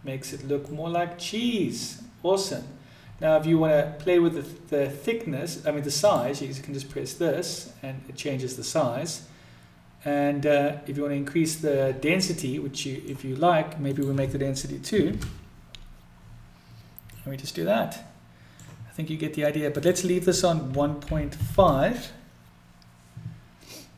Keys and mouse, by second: 0.4-1.5 middle drag, 6.4 click, 11.8 middle click, 13.5-15.9 drag, 16.7-18.3 middle drag, 19.3-23.5 drag.